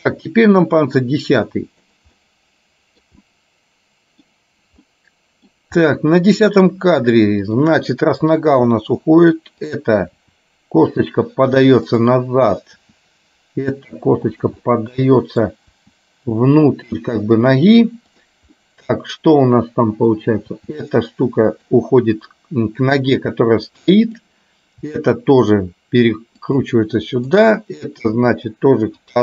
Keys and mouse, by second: 2.3 middle click, 3.3-4.4 middle drag, 4.9 middle click, 5.9 middle click, 7.4 click, 8.7 r, 10.4 r, 12.0 click, 14.8 middle click, 15.9 r, 18.7-20.3 middle drag, 20.7 r, 24.2 click, 25.0 r, 28.2 r.